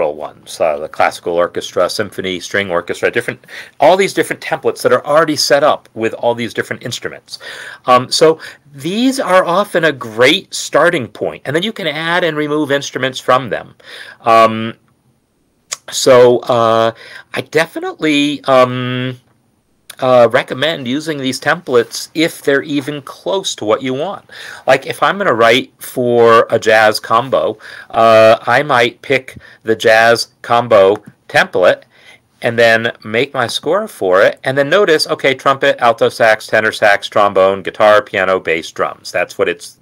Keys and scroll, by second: 32.7 Return.